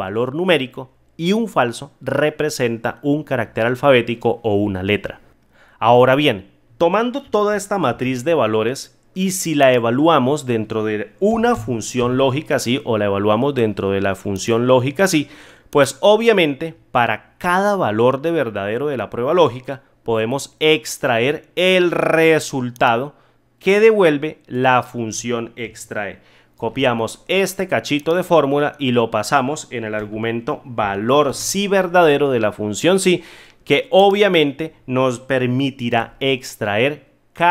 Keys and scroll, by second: 7.8 ctrl+z, 26.5 ctrl+c, 31.2 ctrl+v, 35.9 F9.